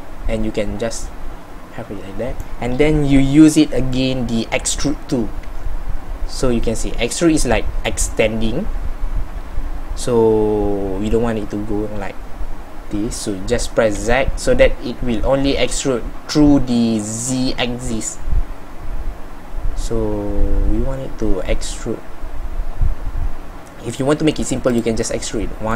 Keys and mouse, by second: 4.1-25.7 middle drag.